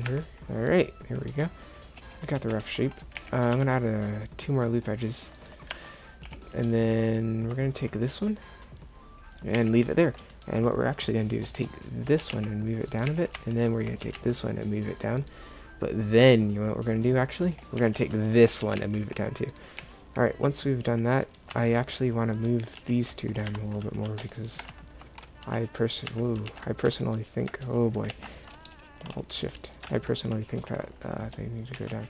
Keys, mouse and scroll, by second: 0.2 Tab, 2.7 Tab, 3.2 a, 3.6 ctrl+r, 6.3 a, 9.6 a, 12.3 g, 14.1 g, 17.9 a, 18.7 g, 19.9 a, 22.8 g, 25.5 z, 26.2 z, 28.2 ctrl+z, 31.8 g.